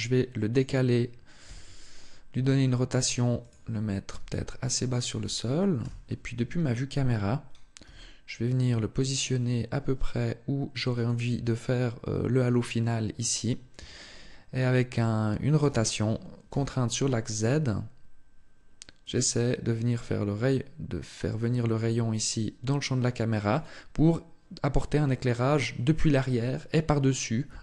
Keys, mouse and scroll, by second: 0.4 click, 1.3 r, 3.3 click, 3.9 g, 4.8 click, 5.6 KP_0, 7.6 g, 10.9 click, 15.4 r, 23.4 click.